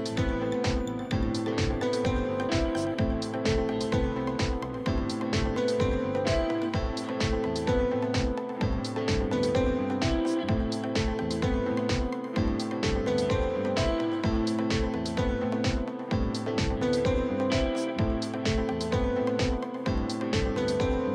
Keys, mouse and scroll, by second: 0.1 shift+middle click, 0.8 click, 1.6 l, 2.8-7.1 drag, 7.4 ctrl+z, 8.2 click, 8.7 click, 9.0 l, 9.5 click, 10.2 scroll down 2, 10.3 shift+middle click, 10.5-11.6 scroll up 2, 11.6 click, 12.3 scroll down 1, 12.5 middle click, 13.3 scroll up 1, 13.4-14.4 shift+middle drag, 14.4 scroll down 2, 14.5-15.8 shift+middle drag, 15.8 scroll down 2, 16.0 middle click, 16.6-17.3 scroll up 1, 17.3 click, 17.8-18.8 middle drag, 20.3 scroll down 1, 20.4-21.1 scroll up 1.